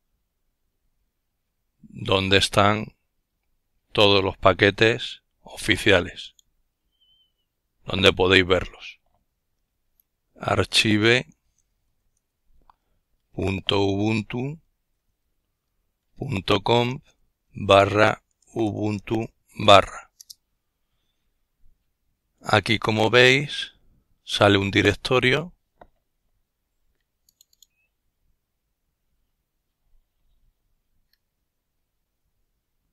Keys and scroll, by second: 10.0-18.1 typing, 18.7 Return, 19.4 typing.